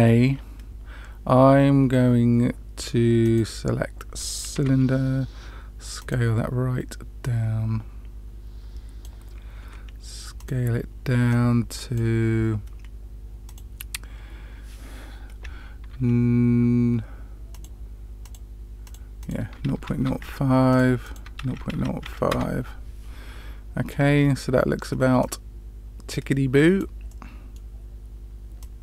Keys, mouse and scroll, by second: 4.5 s, 7.2-9.0 drag, 9.6 s, 11.2-12.0 drag, 13.4-17.7 drag, 18.2 click, 19.1-20.7 drag, 21.0-22.7 drag, 24.1-25.1 scroll up 2, 25.1-26.9 drag, 27.0-27.5 middle drag, 28.5-28.8 drag.